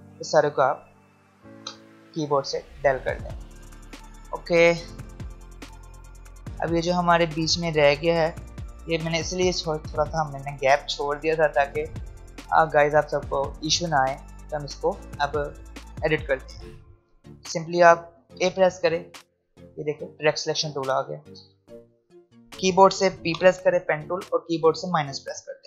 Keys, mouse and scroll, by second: 5.0 alt+scroll up 1, 10.3-11.2 alt+scroll down 1, 13.0-14.1 alt+scroll up 1, 14.1-14.6 alt+scroll down 1, 16.6 click, 18.4 a, 25.3 p.